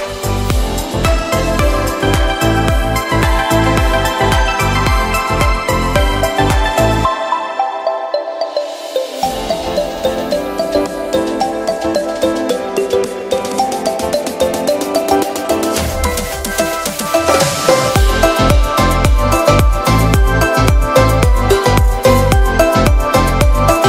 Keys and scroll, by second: 6.2 v, 7.9 z, 15.9 Return, 17.9 z, 19.5 b.